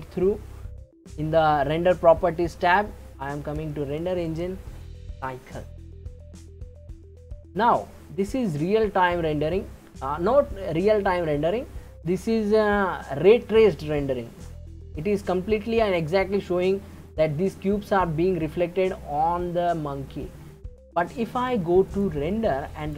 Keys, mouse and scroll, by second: 0.0 click, 1.8-5.8 scroll up 9, 7.1-10.2 middle drag, 14.4-17.4 middle drag, 21.9-22.9 drag.